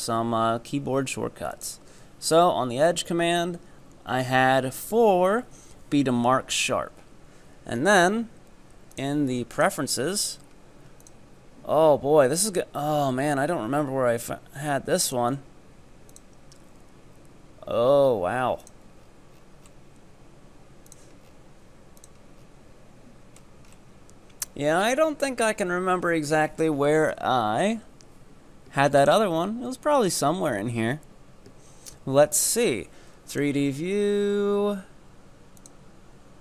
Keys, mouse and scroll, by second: 1.5-4.7 drag, 8.9-12.0 drag.